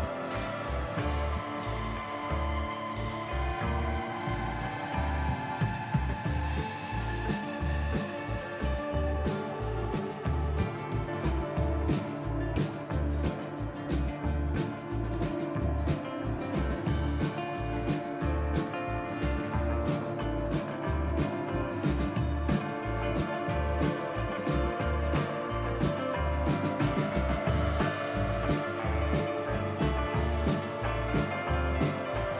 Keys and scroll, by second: 8.2 ctrl+c, 8.4 ctrl+v, 9.6 2, 11.2 ctrl+z, 14.5 ctrl+z, 19.3 ctrl+z, 22.5-23.4 typing, 26.6 F4.